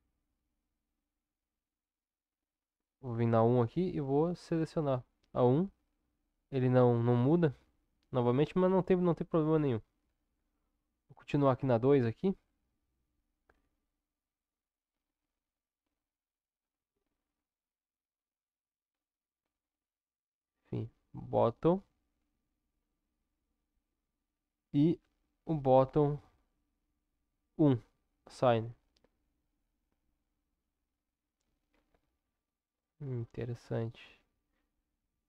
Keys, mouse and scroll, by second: 4.4-24.1 drag, 31.7 Tab.